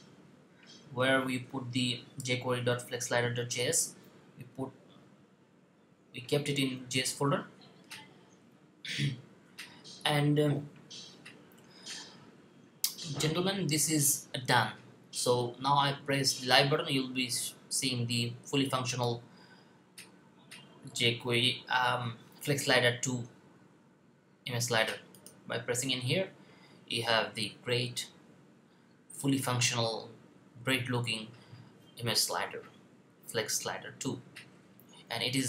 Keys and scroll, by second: 6.8 typing.